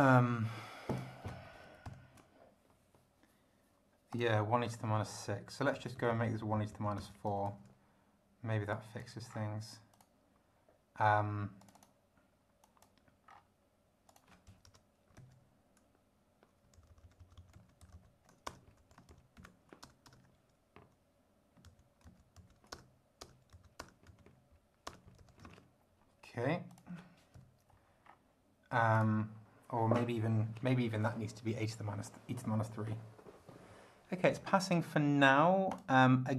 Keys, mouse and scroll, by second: 0.9 click, 1.8 ctrl+alt+b, 4.1 click, 5.7 Home, 5.9 ctrl+shift+Right, 7.4 ctrl+shift+c, 8.7 click, 9.3 scroll down 2, 9.9 click, 11.6 click, 12.6 click, 13.3 scroll down 2, 14.1 click, 14.7 Return, 15.2 ctrl+v, 16.8 ctrl+Left, 17.5 ctrl+Right, 17.8 ctrl+shift+Left, 18.5 ctrl+shift+BackSpace, 18.8 ctrl+shift+End, 19.1 ctrl+shift+Left, 19.4 ctrl+shift+Right, 19.8 ctrl+shift+BackSpace, 20.1 ctrl+shift+4, 21.6 ctrl+Left, 22.7 ctrl+BackSpace, 23.5 Left, 23.8 BackSpace, 24.1 Right, 24.3 `, 24.9 BackSpace, 25.2 End, 25.4 Down, 26.7 click, 27.3 ,, 28.0 scroll down 1, 28.9 click, 35.7 click.